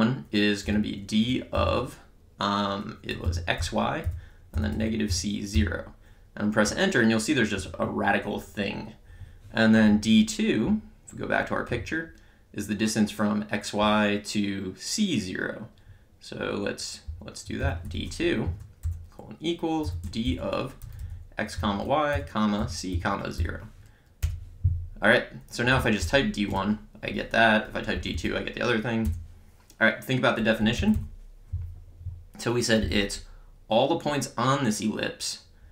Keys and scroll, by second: 0.7 d, 1.6 (, 2.9-6.0 typing, 7.5 Return, 17.1 Return, 17.4-18.8 typing, 19.9-23.9 typing, 24.2 Return, 25.8 d, 26.0 1, 26.6 Return, 28.0 Up, 29.1 BackSpace, 30.7 Down.